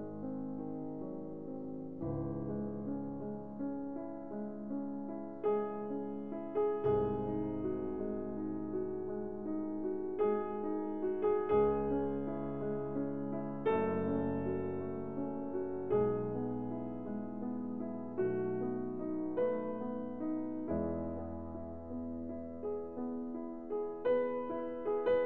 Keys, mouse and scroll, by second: 0.4 click, 1.7 1, 2.7 Return, 4.2-4.8 scroll, 5.8 middle click, 7.2 click, 7.9 middle click, 8.0 middle click, 8.5 middle click, 9.1 scroll, 9.9-10.8 ctrl+scroll, 13.0 click, 15.8-16.9 drag, 17.2-18.3 drag, 18.8-19.8 drag, 20.4-21.5 drag, 22.2-23.3 drag, 24.3-25.2 drag.